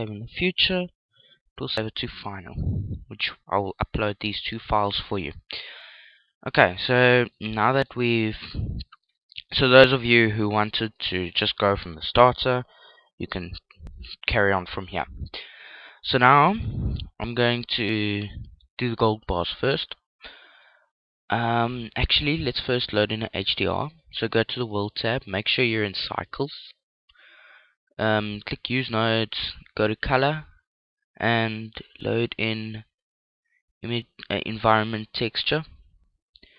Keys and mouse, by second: 0.0 Return, 6.6-10.2 middle drag, 15.7-17.6 middle drag, 18.4 right click, 22.1-26.6 drag, 27.6-31.2 drag, 36.5 click.